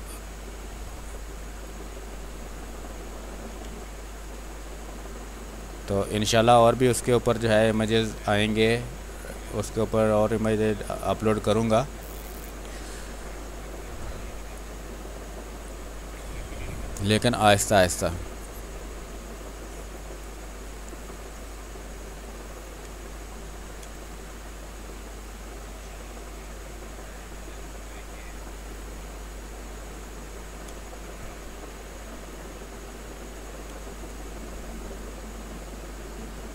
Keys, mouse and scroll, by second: 2.1 space, 2.4 click, 3.5 ctrl+z, 4.0-6.1 drag, 6.4-8.6 drag, 8.6-12.1 drag, 12.1 space, 12.2 alt+click, 20.1 click, 21.1 r, 21.2 click, 22.3 b, 23.0 ctrl+space, 23.3 ctrl+click, 28.7 space, 29.1 click, 29.2 space, 33.8 space, 34.0 click, 34.3 space, 35.2-36.5 drag.